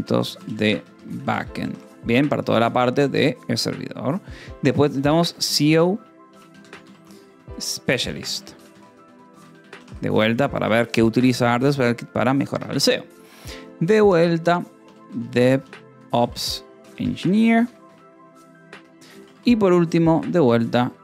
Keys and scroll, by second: 0.0-2.8 typing, 5.1 shift+o, 5.4 space, 5.7 BackSpace, 6.7-10.6 typing, 15.0-17.3 typing, 17.7 Escape, 18.6 o, 19.1 -, 19.2 space.